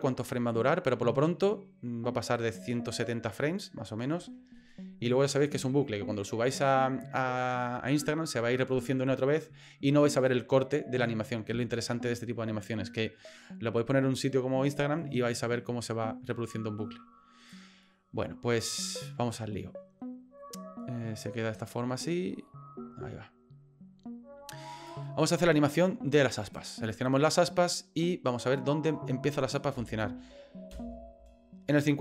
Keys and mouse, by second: 17.5-24.9 drag, 26.5 right click, 28.0-29.5 drag, 29.7 space, 30.7 space, 31.8-32.0 drag.